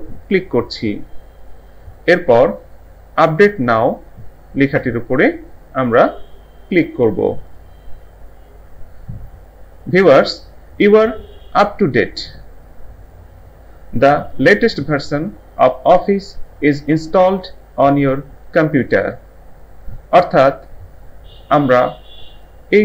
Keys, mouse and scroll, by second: 0.3 click, 7.5 click.